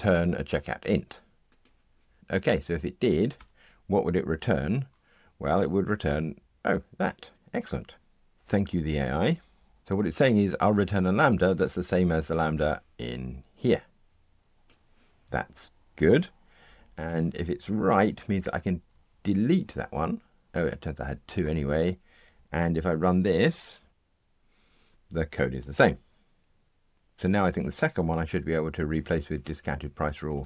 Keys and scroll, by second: 5.6 Tab, 18.4 super+BackSpace, 20.5 super+BackSpace, 23.4 ctrl+r, 28.7 super+c.